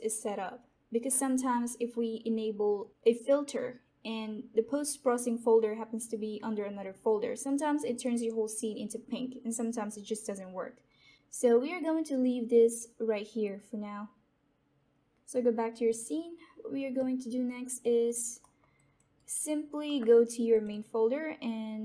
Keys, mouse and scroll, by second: 15.8 click, 16.9 alt+click, 18.0 alt+right click, 18.3 alt+middle click, 18.7 alt+click, 19.1 alt+right click, 20.5 click.